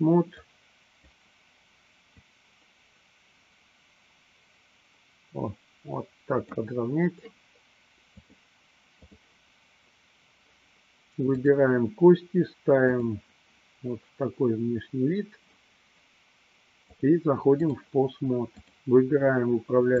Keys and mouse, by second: 0.6 click, 2.2-6.7 drag, 8.3-9.3 drag, 11.3-11.7 drag, 13.2 click, 16.8-17.8 drag, 18.7 click.